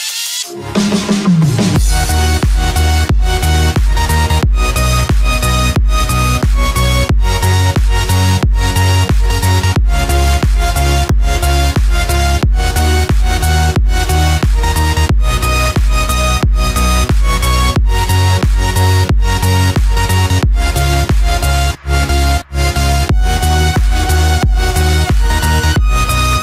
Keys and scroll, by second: 2.6 ctrl+-, 3.9 ctrl+=, 4.9 ctrl+-, 7.9 ctrl+j, 23.0 ctrl+=.